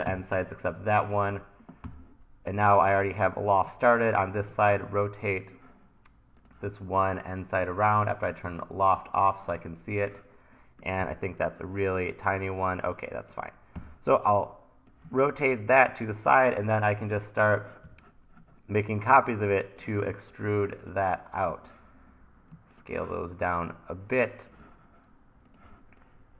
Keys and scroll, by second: 0.1 Delete, 1.9 t, 2.5 r, 4.7 super+z, 11.0 t, 13.8 r, 17.9 e, 23.1 t, 25.7 t.